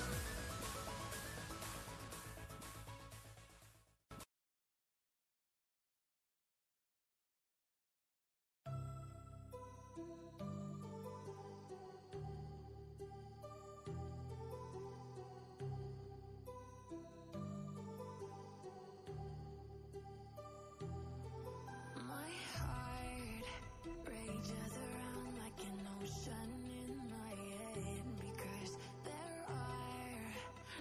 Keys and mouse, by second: 3.2 Return, 4.1-5.6 typing, 5.7 ctrl+Return, 8.6-9.5 shift+drag, 22.4-24.6 drag.